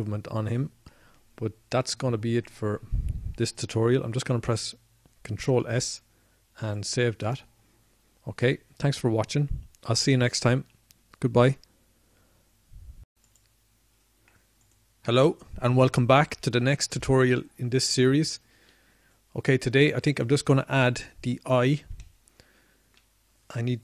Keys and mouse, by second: 0.9 middle click, 2.8-4.7 middle drag, 5.3 click, 8.6 ctrl+s.